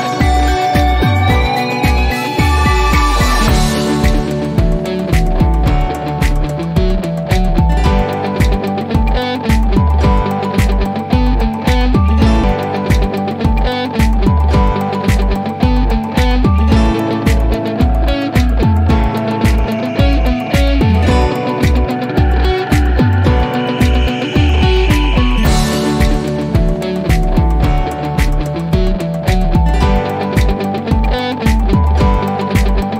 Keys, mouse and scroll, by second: 3.9 click, 6.7 click, 12.7-14.0 drag, 16.0 typing, 16.4 Return, 19.9 typing, 21.7 Return, 24.9 typing, 26.5 Return, 28.5-29.1 click, 29.3 typing, 30.1 Return.